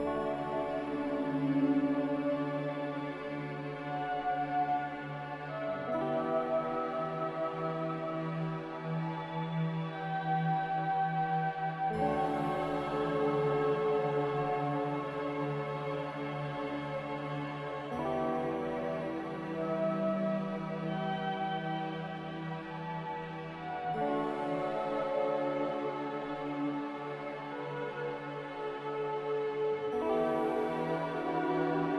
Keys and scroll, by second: 2.2 typing, 2.9 Return, 8.4 z, 9.8 ctrl+z, 16.1 Return, 16.1 3, 19.2 v, 20.5 x, 22.2 3, 22.4 Return, 25.7 ctrl+z, 27.7 z.